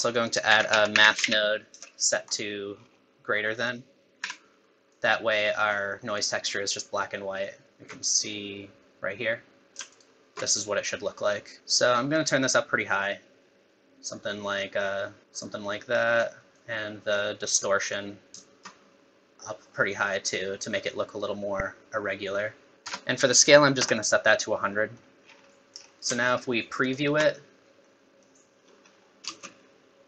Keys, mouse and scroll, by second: 0.1 click, 0.5 shift+a, 2.8-3.1 scroll up 6, 3.6 click, 4.9 click, 7.7 ctrl+shift+click, 10.0 ctrl+shift+click, 11.6 middle click, 11.6 scroll up 2, 12.1 click, 16.6 click, 18.4 shift+click, 22.7 click, 22.7 KP_0, 24.7 middle click, 25.3-25.7 scroll down 6, 25.5 middle click, 26.8 ctrl+shift+click, 27.8 middle click, 28.6 scroll down 3, 28.9 scroll up 1, 29.2 space.